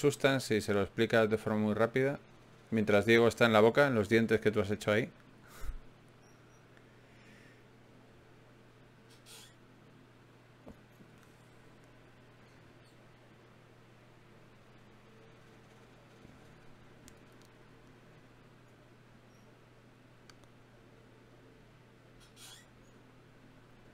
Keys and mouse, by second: 0.7-2.5 right drag, 1.7 e, 3.5 e, 6.7 ctrl+Tab, 7.5 right click, 8.3 f, 8.5 f, 11.1 ctrl+Tab, 12.5-13.7 drag, 14.3 ctrl+Tab, 14.3 right click, 15.9 f, 17.3 ctrl+Tab, 19.9-21.9 drag, 21.9-23.0 middle drag, 22.8-23.9 drag, 22.8 right click.